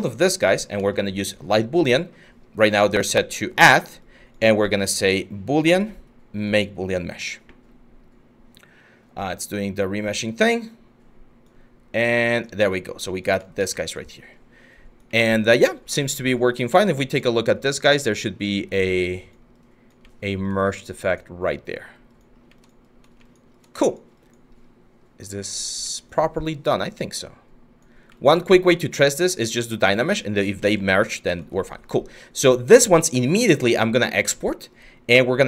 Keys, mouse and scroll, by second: 30.2 ctrl+z.